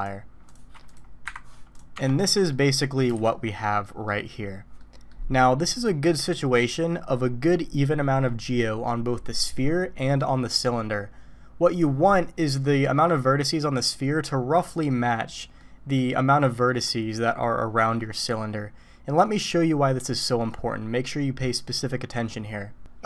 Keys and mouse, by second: 0.5 click, 0.9 click, 1.2 Delete, 1.7 click, 1.9 Tab, 2.3 click, 3.1 alt+a, 3.3 click, 3.8 middle click, 4.3 click, 4.8 middle click, 15.6 middle click, 16.7 middle click.